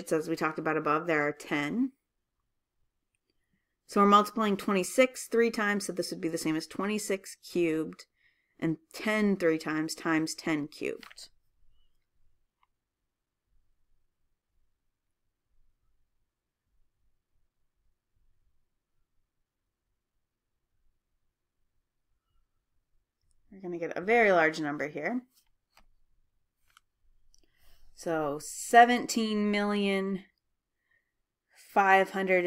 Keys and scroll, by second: 13.7 2, 14.6 6, 15.7 ^, 16.8 3, 18.3 Right, 19.5 1, 20.9 0, 22.5 ^, 23.4 3, 24.3 Return.